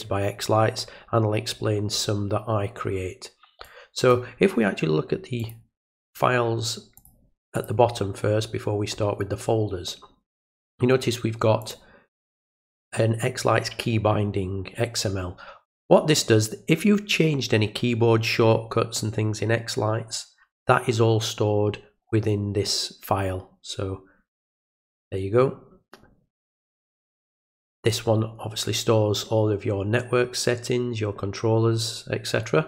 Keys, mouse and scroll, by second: 3.6-4.1 drag, 5.4 click, 6.1 click, 7.0 click, 7.6 click, 11.6 click, 26.4 click.